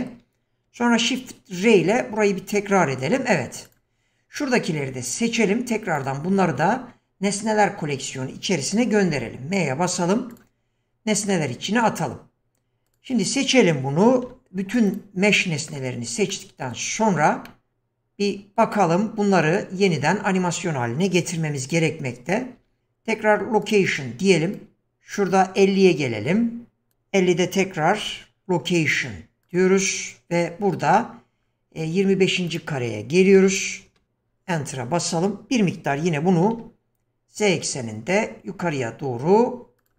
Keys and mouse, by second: 1.9 shift+r, 4.6-6.0 drag, 9.1 m, 11.3-12.6 middle drag, 14.2 q, 16.3-16.7 middle drag, 17.5-18.6 shift+middle drag, 22.5 i, 24.5-26.9 drag, 27.9 i, 32.5 click, 35.9 g.